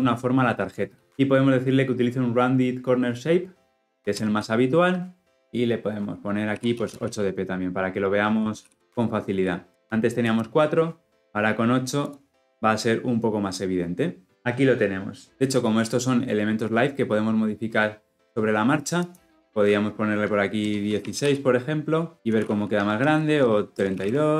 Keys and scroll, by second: 4.1 Return, 9.1 shift+F10.